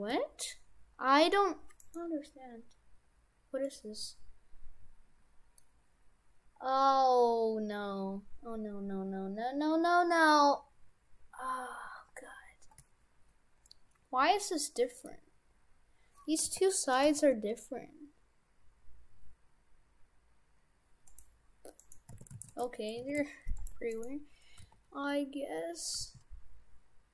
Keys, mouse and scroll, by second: 3.7 middle click, 13.7 middle click, 15.3-16.4 scroll down 3, 16.4 g, 17.2 g, 21.9 right click, 22.2 shift+f, 22.7 Tab, 23.1 shift+f, 23.7 Tab, 23.9 right click, 24.6 g, 26.0 g.